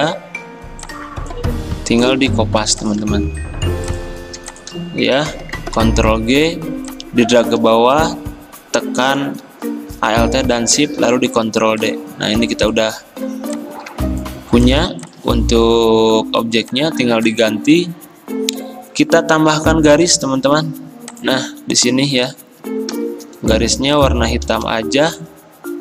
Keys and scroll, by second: 3.4 Escape, 5.8 ctrl+g, 11.1 ctrl+d, 19.6 p, 23.0-23.6 typing, 24.8 v.